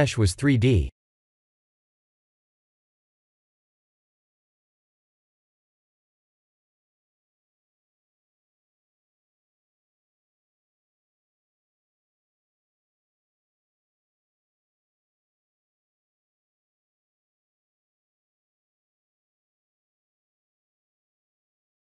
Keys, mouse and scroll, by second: 0.4 middle click, 2.8 Tab, 3.2 click, 3.6 x, 4.2 shift+a, 7.3 KP_1, 7.6 KP_7, 9.7 shift+z, 10.3 Tab, 10.9 click, 11.3 b, 11.8 g, 14.0 click, 14.3 b, 15.1 g, 16.9 ctrl+r, 18.3 right click, 18.7 click, 19.1 b, 19.7 g, 20.9 click.